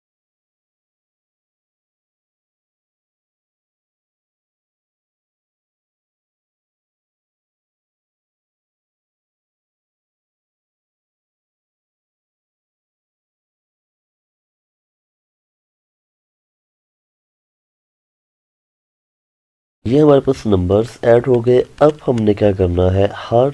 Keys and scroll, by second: 0.4 Return, 2.2 Tab, 15.9 Return, 19.2 Return.